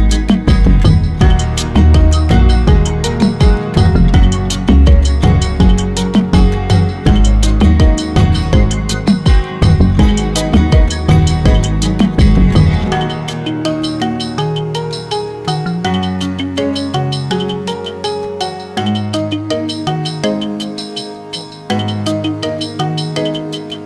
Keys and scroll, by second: 10.4 Right, 10.5 Right, 10.7 Right, 10.8 Right, 10.9 Right, 11.3 Right, 12.4 Down, 12.5 Down, 12.7 Down, 12.9 Down, 13.1 Down, 13.1 Down, 13.4 Down, 15.6 Return.